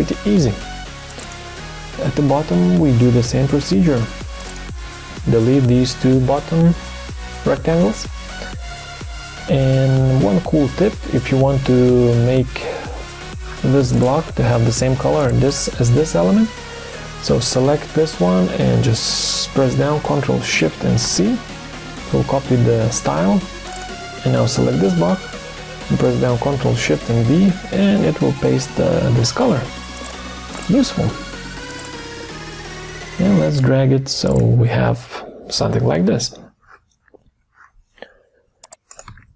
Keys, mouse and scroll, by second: 4.0 Delete, 5.4 Delete, 21.0 ctrl+shift+c, 27.1 ctrl+shift+v, 39.1 ctrl+d.